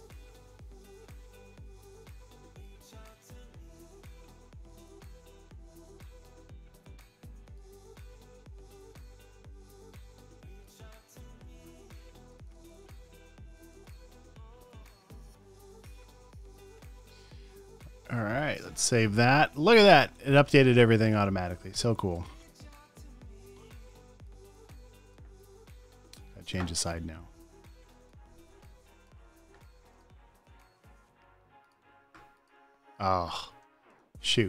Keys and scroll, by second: 0.4 super+z, 2.0 shift+super+z, 2.8 space, 3.3 super+space, 4.1 space, 6.1 alt+BackSpace, 8.7 alt+BackSpace, 11.7 alt+BackSpace, 11.8 space, 13.4 space, 13.4 space, 13.8 space, 14.1 v, 16.3 super+s, 16.9 space, 18.2 space, 18.8 super+w, 22.5 super+space, 23.0 super+space, 23.6-25.8 typing, 31.1 space, 34.0 space.